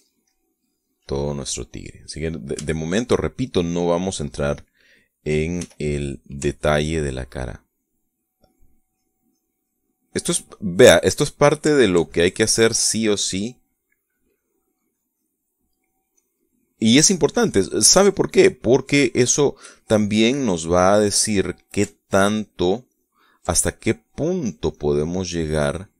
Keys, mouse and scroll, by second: 0.4-1.4 shift+middle drag, 1.7 middle click, 1.8 click, 2.1-4.4 middle drag, 6.4 f, 6.9 click, 7.4 ctrl+click, 7.9 ctrl+click, 9.1 ctrl+click, 9.7-11.1 ctrl+drag, 11.2 ctrl+click, 11.6 ctrl+middle click, 12.2 ctrl+click, 12.5 ctrl+click, 13.4-14.7 ctrl+drag, 15.2-19.3 drag, 20.5-22.1 drag, 22.7-24.3 ctrl+drag, 24.7 click, 25.3 click.